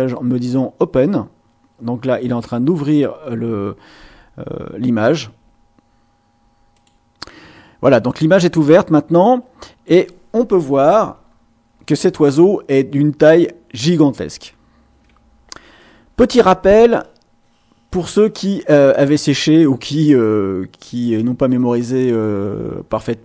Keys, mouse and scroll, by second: 6.7 click, 8.7-10.0 drag, 11.2-12.0 ctrl+scroll down 4, 14.6 ctrl+scroll up 2.